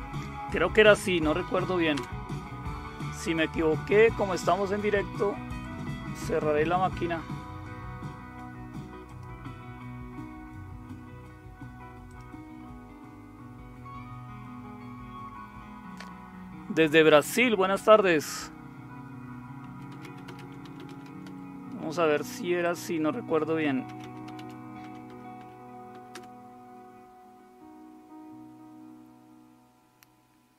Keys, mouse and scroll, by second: 0.7-1.9 typing, 5.6 click, 9.0 click, 12.1 click, 19.4-21.8 typing, 22.6 click, 23.4-25.9 typing, 26.1 Return.